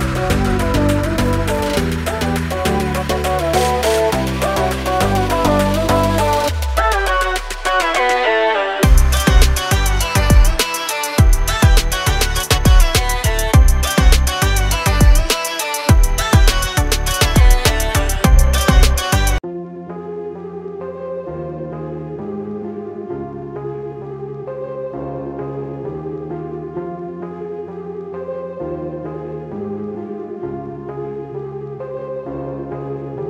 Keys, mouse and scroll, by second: 6.7 BackSpace, 7.0 click, 7.4 BackSpace, 8.2 click, 8.4 BackSpace, 9.2 click, 15.5 a, 19.1 i, 19.7 click, 22.3 z, 23.9-24.7 typing, 24.7 click, 29.4 click.